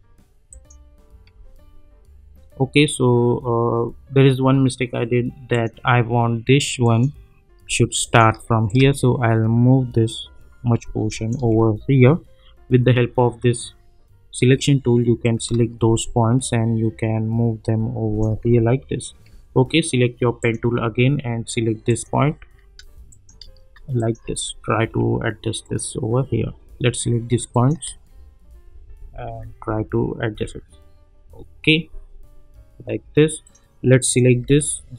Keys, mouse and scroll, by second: 0.5 shift+click, 5.5 click, 8.0 shift+click, 8.9-11.4 shift+drag, 11.6-12.0 alt+scroll up 2, 15.2-18.5 drag, 18.5-19.3 alt+scroll down 2, 19.3-19.9 scroll down 1, 19.9-20.4 scroll down 1, 20.4-22.7 drag, 23.1 shift+click, 23.9 shift+click, 24.6-25.0 alt+scroll up 2, 25.6 click, 27.5 shift+click, 28.7 Down, 31.3-33.1 scroll down 1, 33.6 click.